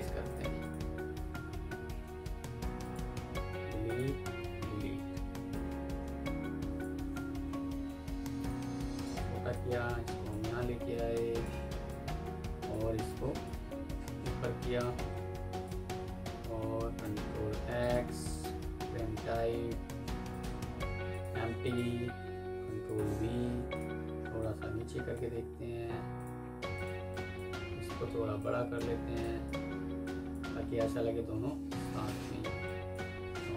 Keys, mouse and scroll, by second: 0.5 double click, 1.7 Delete, 3.1 Delete, 5.4 alt+click, 7.4 ctrl+g, 10.6 F2, 16.9 ctrl+x, 18.2 right click, 21.5 ctrl+click, 22.0 ctrl+v, 22.7 ctrl+click, 23.3 alt+scroll up 2, 26.6 alt+click, 31.7 alt+click.